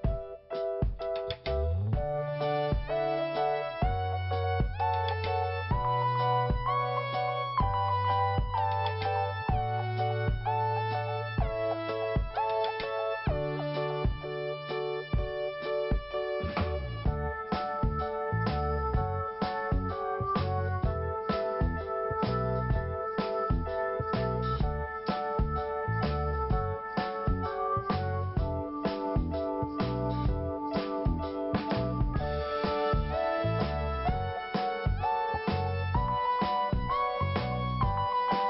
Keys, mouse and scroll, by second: 3.5 t, 5.6 p, 7.2 click, 8.4 scroll down 2, 9.6 scroll up 2, 10.8 click, 10.9 click, 12.1 scroll up 2, 12.9 click, 13.1 click, 13.9 right click, 14.1 right click, 14.7 click, 15.9 click, 16.0 click, 16.7 click, 16.7 click, 17.1 click, 17.2 click, 18.3 ctrl+n, 18.5 ctrl+n, 20.3 click, 20.4 click, 21.3 click, 23.6 click, 25.0 scroll up 1, 25.1 click, 26.3 click, 26.3 scroll up 1, 27.3 scroll down 2, 29.4 p, 30.5 click, 32.8 scroll up 1, 34.3-34.8 scroll up 2, 35.8 click, 35.9 click, 36.8 click, 36.9 click, 37.8 click.